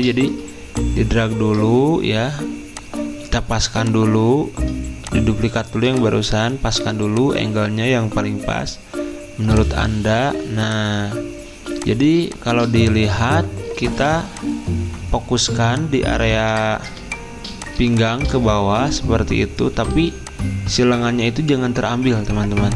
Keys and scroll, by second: 16.3 z, 19.9 z.